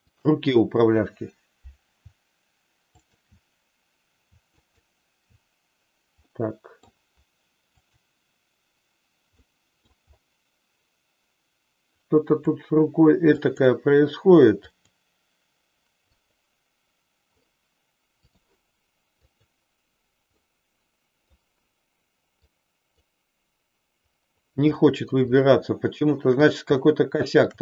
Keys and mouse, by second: 0.0 shift+click, 2.9 shift+click, 4.6 shift+click, 6.2 middle click, 7.8 click, 9.4 middle click, 12.0 click, 13.5 click, 14.5 click, 16.1 click, 18.2 click, 19.1 click, 20.4-21.4 middle drag, 22.5 click, 24.8 middle click, 25.5 shift+middle click, 27.1 shift+click.